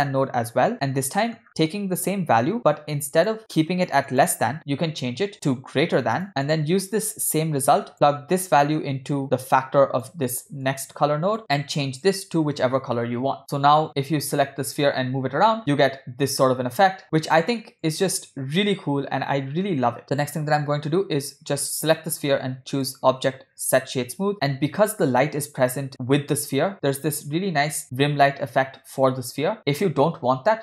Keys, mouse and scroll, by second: 0.6 shift+d, 1.2 middle click, 1.4-2.0 scroll down 1, 2.4-3.4 drag, 3.4 scroll down 1, 4.1-6.2 drag, 6.2 middle click, 6.2 scroll down 1, 7.0-7.9 drag, 7.9 middle click, 8.6-10.2 drag, 10.7 click, 11.4 middle click, 11.4-11.7 scroll up 2, 13.8 click, 13.8 g, 14.7 g, 20.1 click, 22.7-24.3 drag, 24.3 scroll up 7, 24.5-25.5 scroll down 4, 25.6-26.0 scroll up 2.